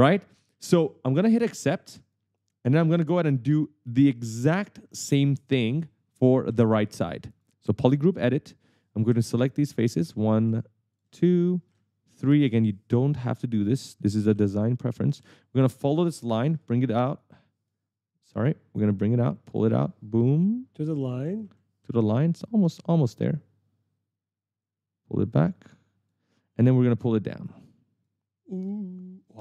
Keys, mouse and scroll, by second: 0.0-1.0 typing, 2.2 click, 3.0 right click, 6.4 right click, 7.5 click, 7.9-8.7 typing, 8.0 right click, 9.9 shift+click, 10.2 right click, 10.2 w, 11.1 shift+click, 11.3 w, 12.3 shift+click, 12.6 right click, 16.4 right click, 16.4 w, 17.3 right click, 18.1 right click, 19.7 click, 21.6 q, 22.0 d, 22.8 e, 24.8 click, 28.2 click.